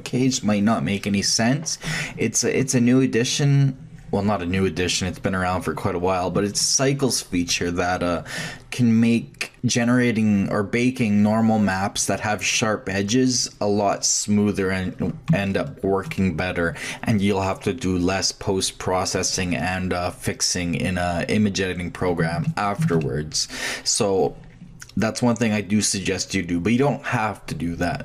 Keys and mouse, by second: 11.2-13.6 middle drag, 14.7-15.5 middle drag, 21.6-22.4 middle drag, 23.1 shift+drag, 23.5-24.9 shift+drag.